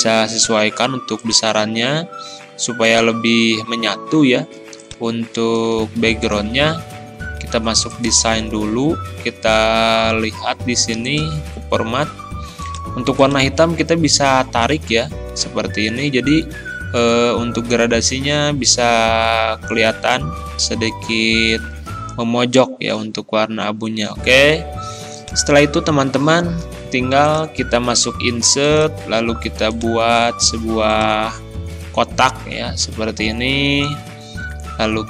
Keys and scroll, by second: 6.5 ctrl+z.